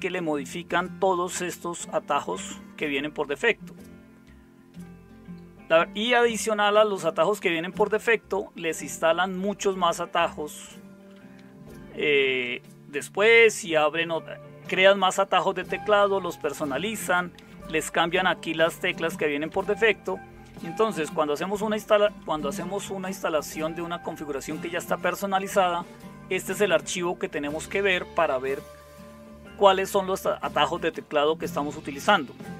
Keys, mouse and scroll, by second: 0.3 Up, 0.8 Down, 1.4 Down, 1.6 Down, 2.2 Down, 8.7-9.4 typing, 11.3-12.0 typing, 12.1 Up, 12.3 Up, 16.6 Up, 16.8 Up, 17.4 Down, 17.7 Right, 17.9 Right, 18.1 Right, 18.7 Right, 18.8-19.5 Right, 19.5 Up, 20.2 Up, 20.2 Up, 20.3 Up, 20.5-30.1 Up, 30.3 Down, 30.5 Down, 30.8 Down, 30.9 Down, 32.1 Down.